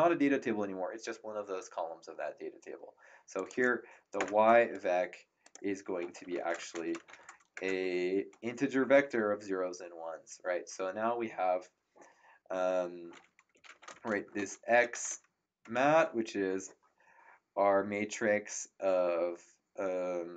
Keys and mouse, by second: 3.3 click, 4.1 ctrl+Return, 5.4 click, 5.9-7.6 typing, 13.3-15.5 typing, 15.6 Return.